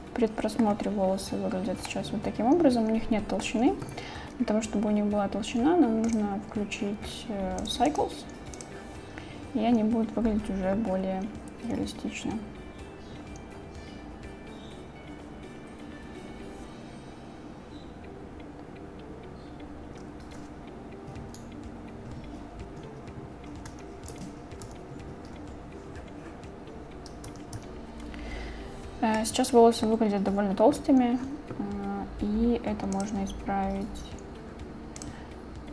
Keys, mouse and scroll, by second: 1.9 middle drag, 2.0-3.5 drag, 6.1 click, 8.0-8.9 drag, 24.8 ctrl+Right, 24.8 ctrl+Up, 24.8 ctrl+Down, 27.3 ctrl+Down, 29.2-29.9 drag, 33.1-35.7 drag.